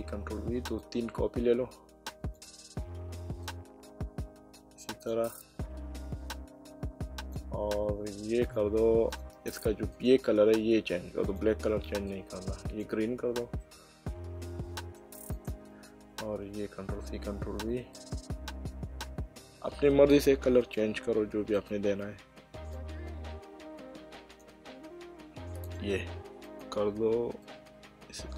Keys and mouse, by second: 0.8 click, 3.4 click, 6.3 click, 8.4 click, 11.2 click, 13.6 middle click, 15.3 click, 16.8 ctrl+v, 17.9 click, 21.5 click, 22.7 click, 25.6 click.